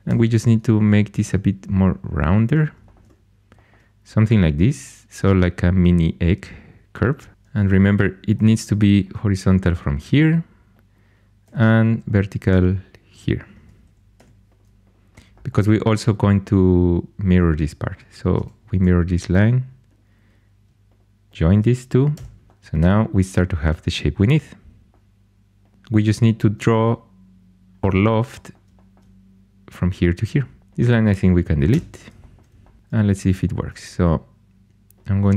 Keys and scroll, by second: 0.0 g, 7.1-8.3 typing, 11.4 g, 14.1 2, 18.3 alt+x, 22.1 j, 30.6 2, 31.6 x, 33.0 2.